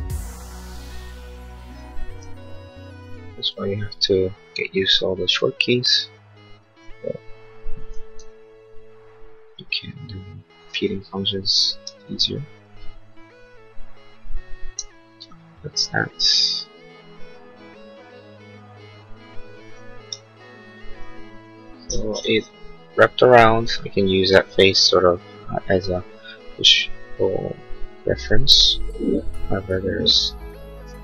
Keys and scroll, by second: 2.5 l, 20.1 e.